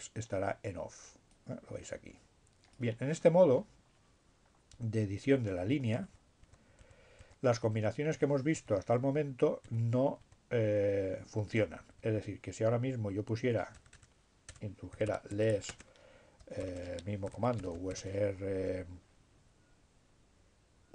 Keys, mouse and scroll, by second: 1.2-3.1 drag, 3.1-3.8 scroll down 1, 4.2 Up, 5.6 Up, 9.6 Up, 10.2 Up, 11.4 Down, 12.3 Up, 13.8-16.3 typing, 17.6 r, 18.1 shift+7, 19.2 s.